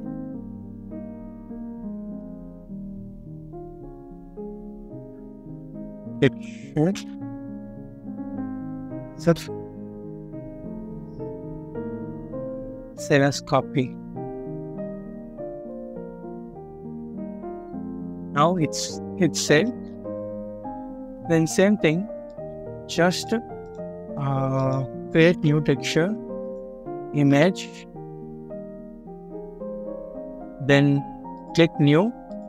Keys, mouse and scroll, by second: 4.8-6.3 typing, 6.8 Return, 8.0 double click, 16.9 scroll up 1, 19.0 scroll down 1, 19.4 middle click, 19.9-20.3 scroll down 1, 20.3 middle click, 25.0 typing, 26.7-27.1 typing, 30.4 scroll up 1, 31.5 typing.